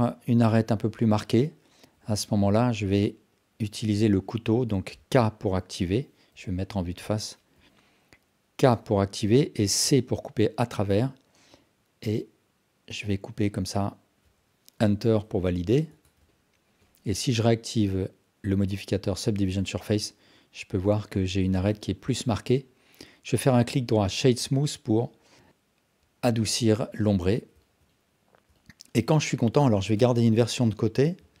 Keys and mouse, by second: 0.7 Tab, 1.2 alt+click, 3.8 alt+click, 4.1 Tab, 5.5 k, 7.6 KP_1, 8.7 k, 15.9 Tab, 16.3-16.7 alt+drag, 19.6-19.9 alt+drag, 20.9-21.3 alt+drag, 21.8 alt+click, 25.0-25.8 alt+drag, 26.5-27.6 alt+drag, 28.5-29.0 alt+shift+drag, 29.8 shift+d.